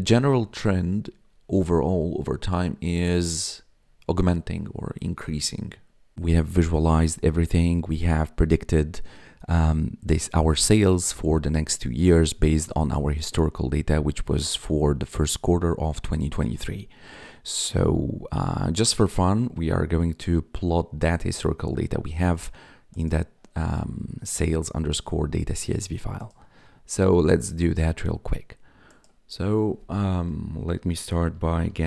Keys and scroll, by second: 31.1-31.8 typing.